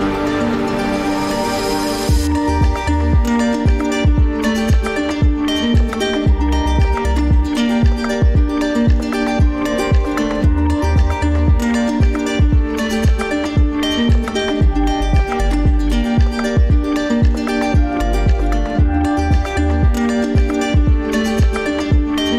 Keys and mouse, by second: 0.7 click, 1.0 g, 3.3 drag, 4.4-5.9 drag, 10.6 click, 13.8 click, 16.3 drag, 16.7 g, 19.0 click.